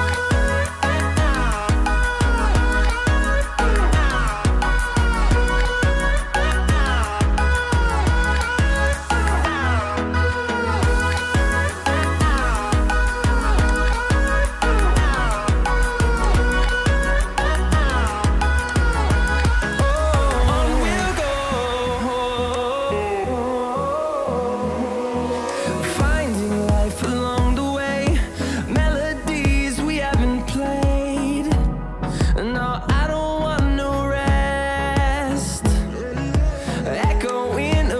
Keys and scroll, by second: 12.1 ctrl+a.